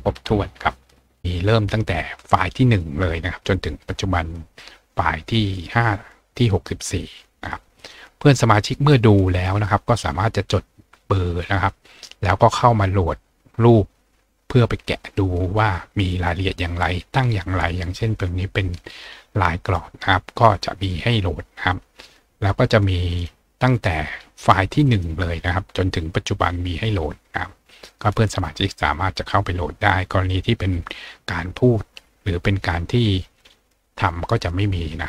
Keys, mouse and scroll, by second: 1.2-1.9 scroll up 2, 1.9-3.6 scroll down 2, 3.6-5.1 scroll up 4, 7.8 click, 20.4 scroll down 2, 21.8 scroll up 2, 23.1 click, 24.9 click.